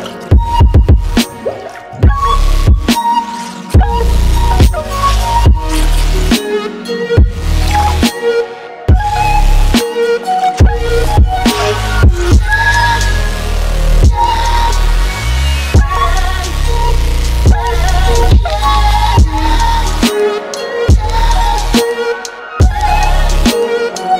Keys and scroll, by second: 1.8 ctrl+c, 11.1 ctrl+t, 12.5 ctrl+t, 18.8 Return.